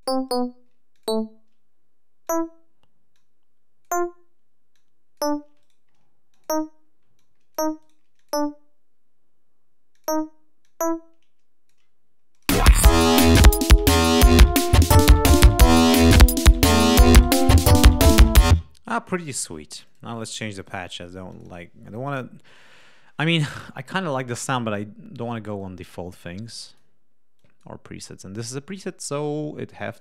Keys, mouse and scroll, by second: 0.1 shift+right click, 0.8 shift+click, 2.1 click, 3.0 click, 4.6 click, 5.4 shift+right click, 6.2 shift+click, 7.0 shift+click, 7.6 shift+right click, 8.0 shift+click, 9.8 click, 10.5-11.7 drag, 12.2 click, 12.4 space, 13.4 g, 14.1 click, 18.3 space, 19.7 click, 20.4 click, 21.1 click, 22.6-23.6 drag, 24.3 click, 25.5 click, 26.5 click, 27.3 click, 28.4 click, 29.6 click.